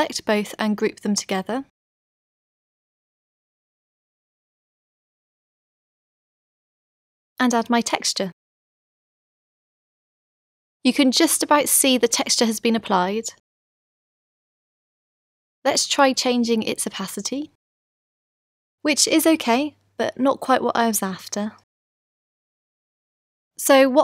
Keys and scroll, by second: 1.7 super+g.